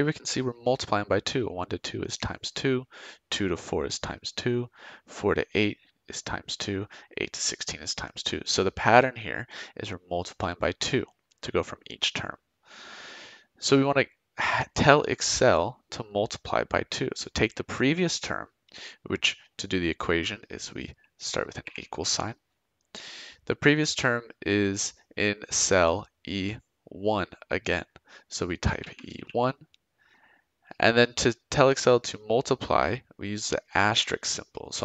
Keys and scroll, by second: 21.6 =, 28.8 e, 29.1 1.